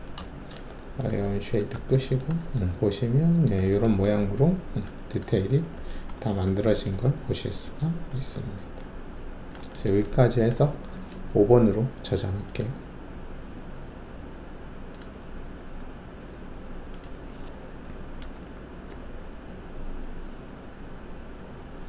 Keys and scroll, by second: 0.5 alt+shift+w, 1.7 alt+`, 18.2 Delete, 18.8 4.